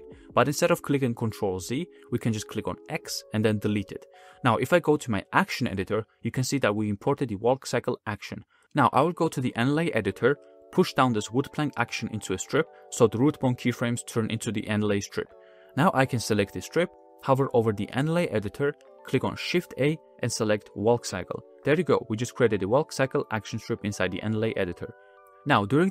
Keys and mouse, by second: 0.3 click, 1.9 x, 4.9-5.4 drag, 11.0 click, 14.9 click, 15.2-17.0 drag, 19.9 shift+a, 22.3 space, 23.9-25.1 drag.